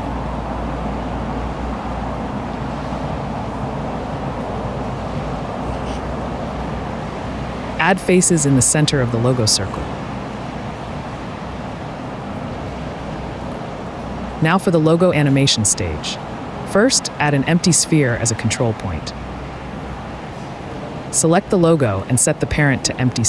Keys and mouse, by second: 0.5 g, 0.7 z, 2.0 s, 2.1 z, 3.8 g, 3.8 z, 6.0 click, 6.6 shift+middle click, 7.9 Tab, 8.9 /, 11.0 f, 11.9 Tab, 12.8 /, 16.2 click, 17.9-19.9 drag, 20.1 ctrl+n, 21.3 n, 22.3 a, 22.9 ctrl+p.